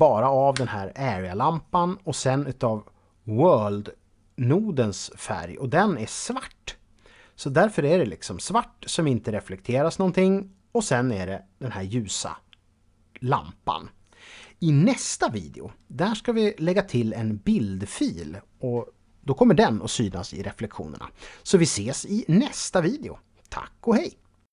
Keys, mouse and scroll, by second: 0.5 Escape, 4.9 click.